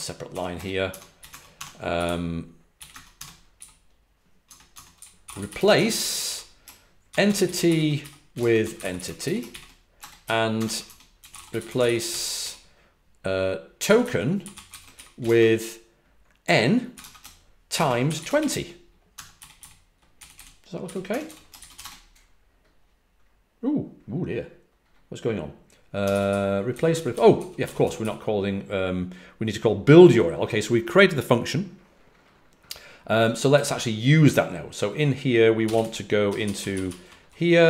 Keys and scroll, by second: 0.2-12.2 typing, 14.3 typing, 16.8-21.7 typing, 25.8-28.4 typing, 33.4 typing, 35.3-37.0 typing.